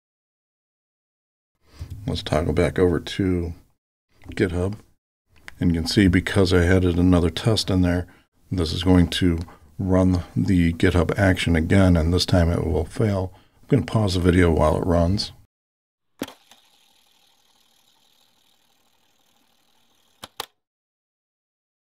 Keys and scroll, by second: 0.5 alt+super+k.